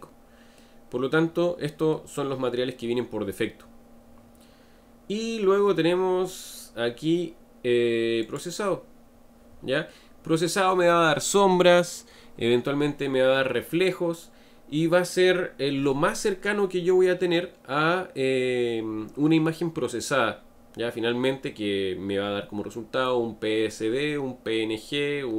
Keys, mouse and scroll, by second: 0.6-3.7 middle drag, 8.3 click, 9.9-13.0 middle drag.